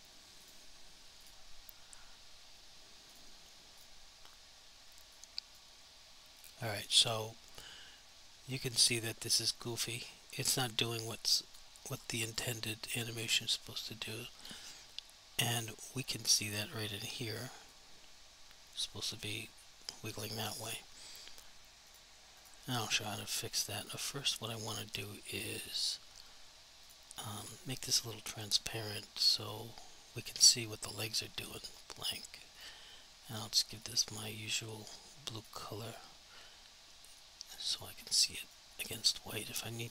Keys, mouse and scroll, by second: 5.2 alt+click, 6.5 alt+click, 7.2 alt+click, 9.2 alt+click, 11.4 alt+click, 11.9 alt+click, 12.3 alt+click, 13.5 alt+click, 15.6 click, 17.8 click, 21.9 click, 37.3 click, 38.5 click, 38.8 double click, 39.0 click, 39.7 alt+click.